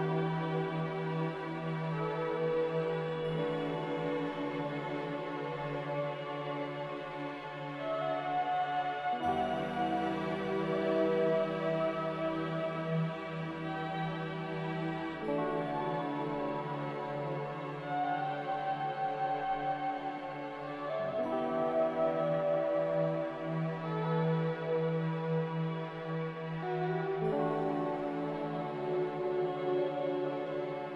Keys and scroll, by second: 12.7 a, 24.6 a.